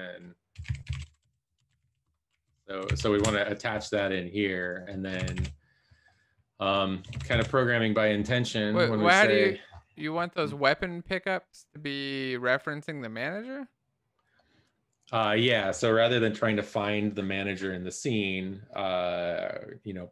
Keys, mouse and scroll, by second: 0.0-2.9 typing, 3.1 Left, 5.8 ctrl+s, 7.5 ctrl+s.